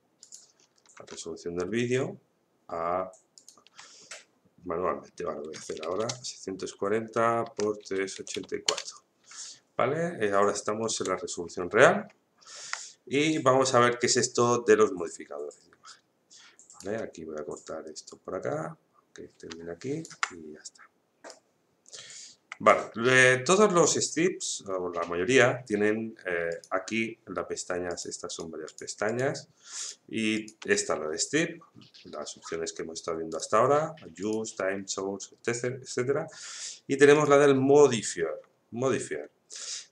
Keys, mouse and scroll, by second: 0.6-2.9 scroll down 1, 3.3 click, 7.4 Tab, 8.7 Return, 12.1 shift+middle click, 13.3-26.2 drag, 26.5 click, 33.3 click, 37.1 click.